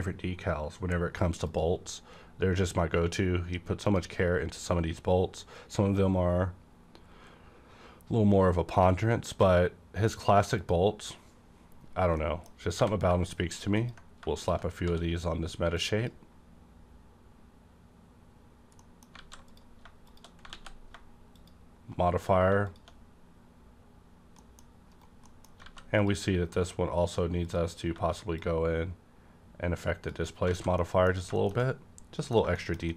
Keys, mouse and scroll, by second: 1.5 click, 3.8 click, 6.0 click, 10.6 click, 10.6 click, 12.2 middle click, 12.8 g, 13.8 ctrl+click, 14.4 ctrl+click, 14.8 d, 15.8 click, 18.8 middle click, 19.2 a, 19.5 click, 19.5 click, 20.1 shift+click, 20.5 alt+x, 22.7 click, 24.1-24.4 scroll down 1, 24.4 middle click, 24.9 right click, 25.2 middle click, 25.4 scroll down 1, 25.6 a, 26.0 click, 27.4 click, 28.4-30.8 drag, 30.5 alt+a, 30.8 middle click, 31.1 scroll down 1, 31.4 middle click, 31.6 middle click, 32.6 shift+middle click.